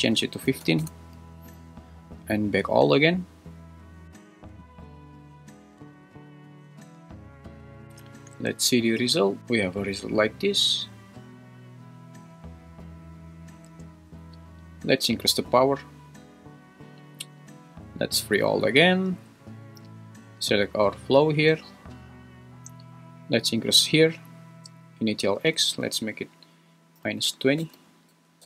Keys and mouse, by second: 0.0 click, 7.4 click, 8.3 space, 9.4 space, 13.7 space, 19.6 click, 24.5-28.4 drag.